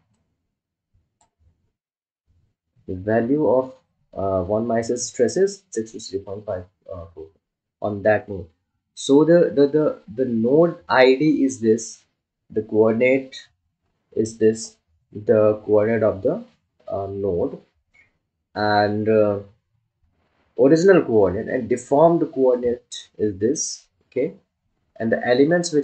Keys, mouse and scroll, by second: 0.9-3.9 drag.